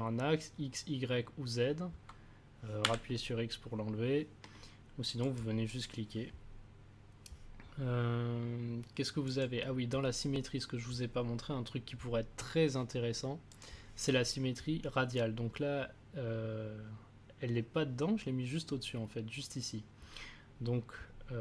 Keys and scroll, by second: 2.8 x.